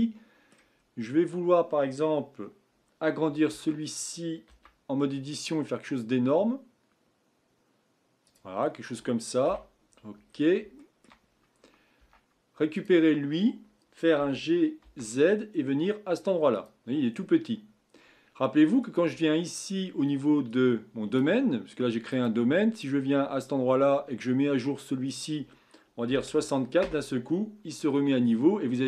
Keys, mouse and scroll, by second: 0.0-0.8 middle drag, 0.8-3.5 scroll down 1, 3.5 Tab, 4.5 s, 8.6-9.4 scroll down 3, 9.4 KP_1, 10.3-10.8 scroll down 6, 10.8 shift+middle click, 11.2-12.0 scroll up 3, 12.0 Tab, 12.7 click, 14.2 g, 18.8 click, 20.5-22.2 drag, 22.7 click, 25.1-28.1 drag.